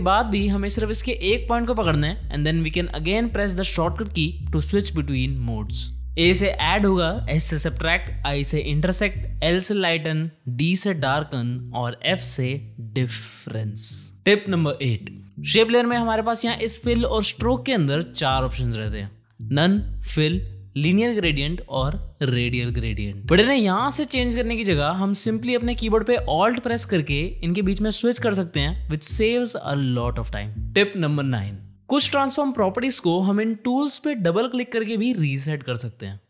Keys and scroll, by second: 0.6 ctrl+z, 3.5 a, 4.0 a, 4.6 s.